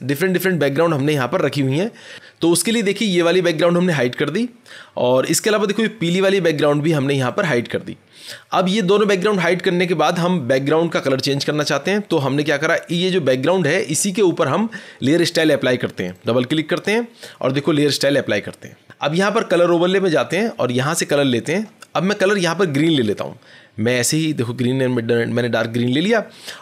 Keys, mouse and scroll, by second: 0.5-1.7 scroll, 3.9 click, 7.3 click, 11.1-11.7 scroll, 12.7 click, 15.9 click, 15.9 scroll, 16.1 click, 19.6 click, 21.1 click, 23.8 click, 24.7 click, 25.9 click.